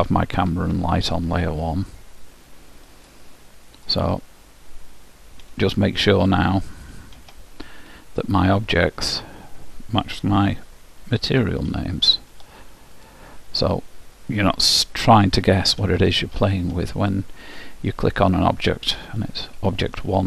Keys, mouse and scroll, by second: 2.1-5.7 drag, 5.7 ctrl+c, 6.9 ctrl+v, 7.3 ctrl+v, 8.7-10.5 drag, 10.6 ctrl+c, 11.5 ctrl+v, 11.9 ctrl+v, 13.1-15.1 drag, 15.3 ctrl+c, 15.9 ctrl+v, 16.4 ctrl+v, 17.7-19.5 drag, 19.7 ctrl+c.